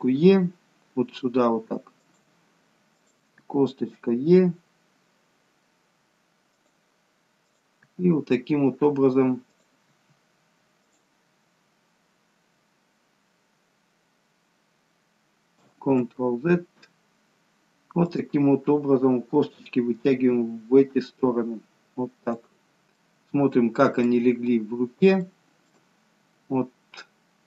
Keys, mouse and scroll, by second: 3.4 e, 8.4 e, 16.0 ctrl+z, 18.4 click, 20.2 e, 24.3-25.2 scroll down 2, 25.2 scroll down 1, 25.3 shift+middle click, 26.0-26.9 scroll up 2.